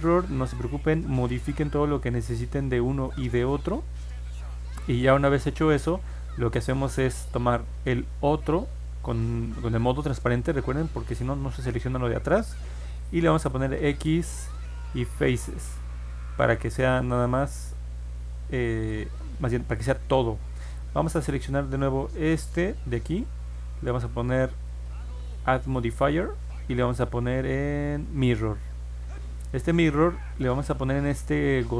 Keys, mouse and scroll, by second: 2.0-3.1 drag, 4.2 click, 5.3 middle click, 6.3-7.5 drag, 9.6 alt+z, 10.2 alt+z, 13.7 x, 15.0 click, 17.6 click, 20.7-22.0 drag, 24.6 click, 28.1 click.